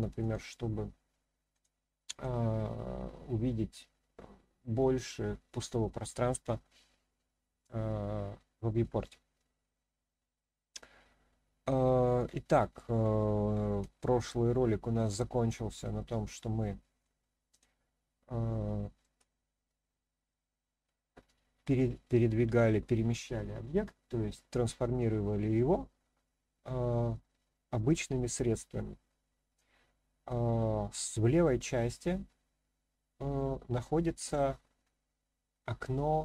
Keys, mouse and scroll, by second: 0.2 click, 1.5 click, 14.0-15.0 shift+middle drag, 15.8-17.0 middle drag, 17.5 click, 18.5-19.0 shift+middle drag, 21.2-22.1 middle drag.